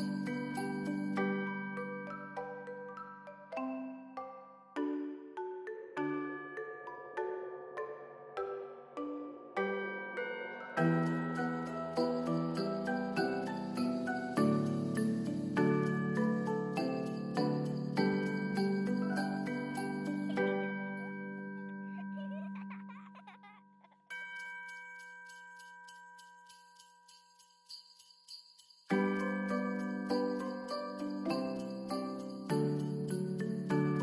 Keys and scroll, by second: 2.0 ctrl+s, 18.7 space, 24.6 ctrl+s, 32.6 ctrl+s.